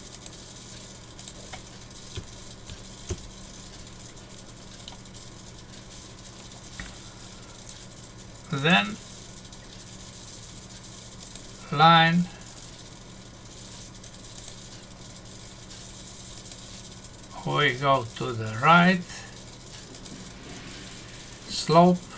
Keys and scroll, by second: 3.1 Return, 4.9 Num_Lock.